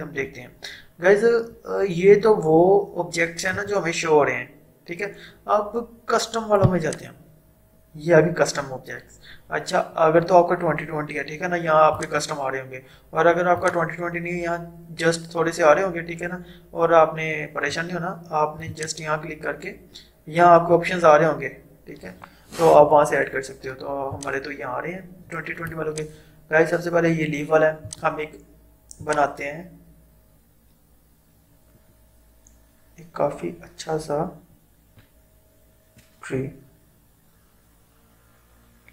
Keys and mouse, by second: 0.3 Delete, 3.6 right click, 6.9 click, 12.0 click, 17.8 right click, 18.8 click, 24.2 click.